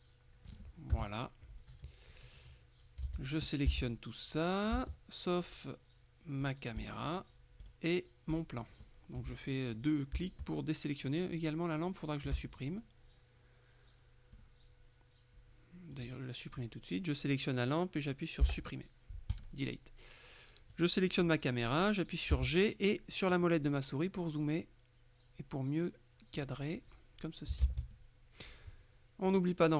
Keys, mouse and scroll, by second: 1.0 KP_0, 3.1 a, 6.5 shift+right click, 7.7 right click, 8.4 right click, 12.7-14.9 shift+drag, 16.0 right click, 18.5 Delete, 19.4 click, 20.8 right click, 22.4 g, 23.4 middle click, 26.4 click, 27.7 ctrl+w, 27.9 ctrl+click, 29.4 click.